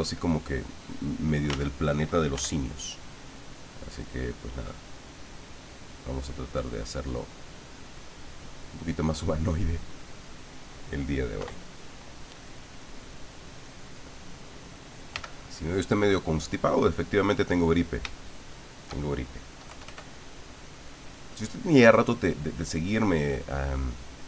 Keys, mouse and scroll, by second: 0.3-1.5 drag, 1.5 ctrl+z, 2.3 f, 3.1 click, 3.8-6.8 drag, 7.2-10.2 middle drag, 11.4 KP_1, 12.8 click, 13.6 click, 15.1 f, 17.0 click, 18.2 shift+middle click, 19.7 KP_Add.